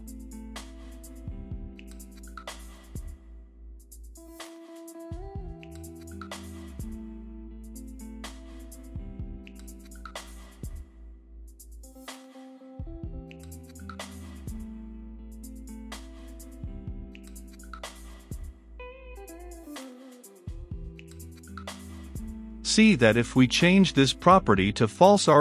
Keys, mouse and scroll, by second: 0.0-0.2 typing, 0.8 click, 1.4 t, 1.5 r, 1.8 u, 1.8 e, 2.4-10.9 drag, 10.9 middle click, 11.8 click, 12.1 right click, 13.1 click, 13.3 middle click, 14.1-15.1 drag, 15.1-16.2 right drag, 16.2-19.7 drag, 19.7-20.7 middle drag, 20.7 click, 21.5-22.2 typing, 23.0-25.4 drag.